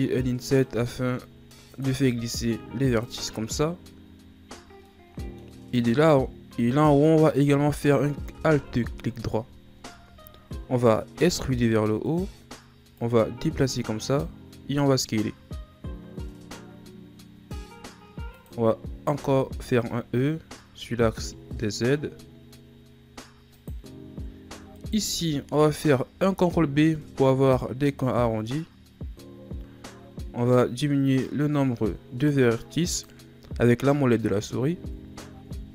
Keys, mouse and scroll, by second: 0.7 i, 2.0 i, 3.4-4.9 scroll down 1, 4.9-7.0 middle drag, 7.0 alt+right click, 8.6 KP_1, 9.6 shift+scroll up 3, 11.2 e, 13.0-14.6 drag, 14.6 s, 24.7 alt+right click, 26.2 ctrl+b, 35.5 Tab.